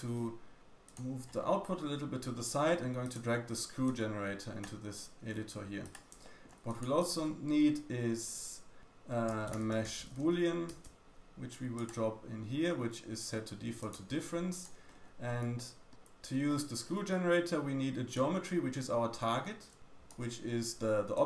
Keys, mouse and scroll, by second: 0.5 click, 0.5 g, 1.2-2.3 scroll down 5, 2.3 middle click, 3.0 click, 3.8-4.5 drag, 5.3 g, 6.0 shift+click, 6.2 shift+middle click, 6.6 click, 7.0 shift+click, 7.0 shift+a, 10.2 o, 13.7 click, 14.0 g, 14.8-15.4 scroll up 5, 15.4 shift+middle click, 15.5 shift+click, 15.8 shift+middle click, 15.9-16.2 scroll up 2, 16.2 shift+middle click, 16.4 shift+click, 16.5 shift+middle click, 18.1-21.2 drag, 18.1-21.2 middle drag, 18.1-21.2 right drag.